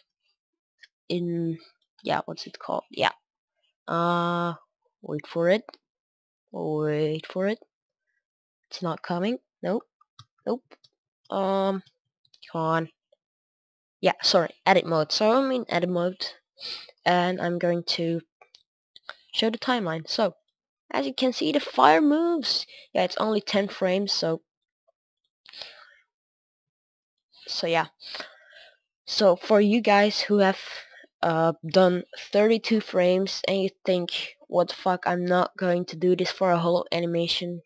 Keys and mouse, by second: 0.1-1.7 drag, 1.8 click, 10.0-15.5 drag, 16.0-37.6 drag.